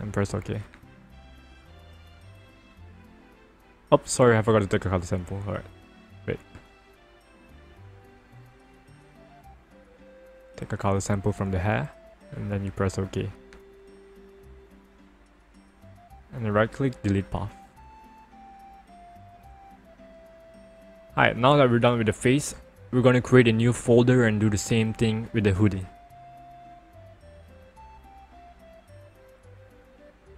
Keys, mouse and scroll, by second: 4.0 ctrl+alt+z, 7.1 right click, 8.5 click, 10.3 click, 12.5 click, 16.1 right click, 16.8 click, 18.9 ctrl+-, 25.9 click, 27.7 click, 28.9 click.